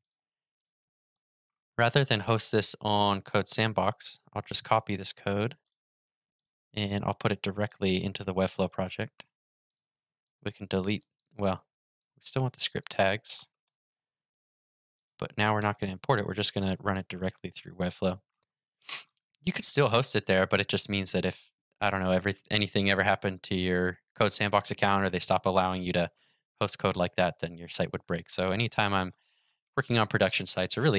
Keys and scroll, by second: 3.7 super+c, 16.3 super+v.